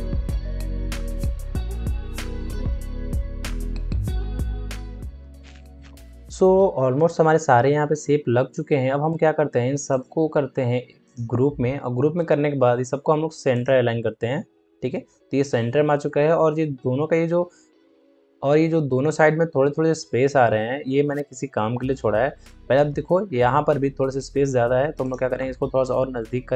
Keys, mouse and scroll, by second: 1.0 shift+Return, 1.1 shift+Left, 1.8 shift+click, 2.5 shift+click, 3.3 shift+Return, 3.5-4.9 shift+drag, 4.9 shift+Return, 9.6 shift+Return, 9.8 shift+click, 12.1 ctrl+a, 13.4 click, 14.5 ctrl+d, 21.4 ctrl+d, 23.1 alt+scroll up 1, 24.9 ctrl+click, 25.9 Left.